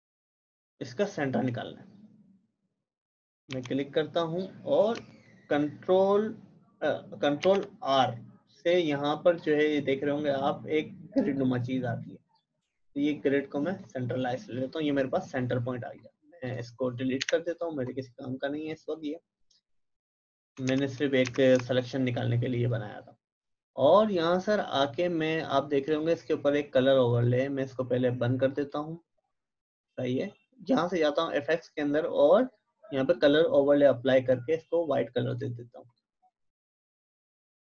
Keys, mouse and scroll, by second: 3.5 v, 7.4 ctrl+r, 11.3-16.0 drag, 17.2 Delete, 20.5 Delete, 20.7 shift+Down, 21.2 Down, 27.1 right click, 28.6 click, 33.1 click.